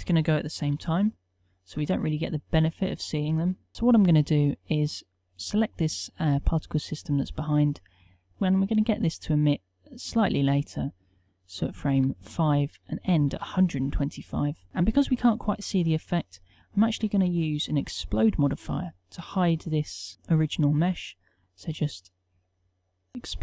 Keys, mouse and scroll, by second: 0.8 alt+a, 3.7 n.